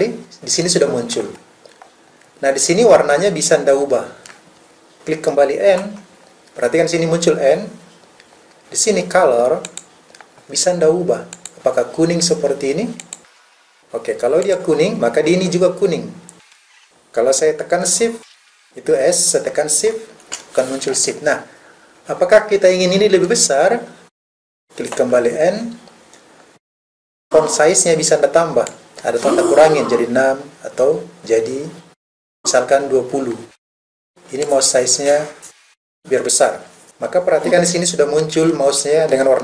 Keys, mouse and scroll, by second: 35.6 click.